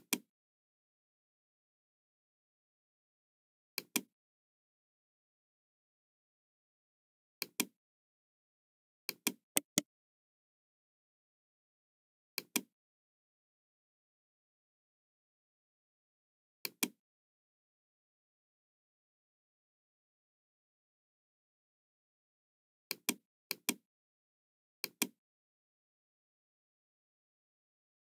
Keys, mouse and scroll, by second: 3.7 click, 7.3 click, 9.0 click, 9.5 right click, 12.3 click, 16.5 click, 20.8 KP_0, 20.8 KP_8, 21.3 Return, 22.9 click, 23.5 click, 24.8 click, 25.2 Return.